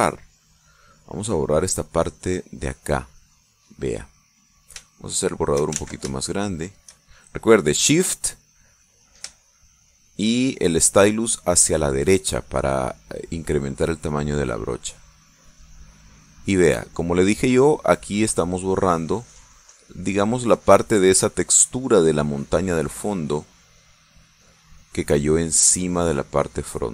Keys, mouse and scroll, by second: 0.2 click, 1.5 click, 2.0 click, 2.7 click, 3.1 middle click, 5.7 click, 6.8 ctrl+shift+z, 7.1 ctrl+shift+click, 10.4-12.4 shift+drag, 13.7-26.2 drag, 26.8-26.9 drag.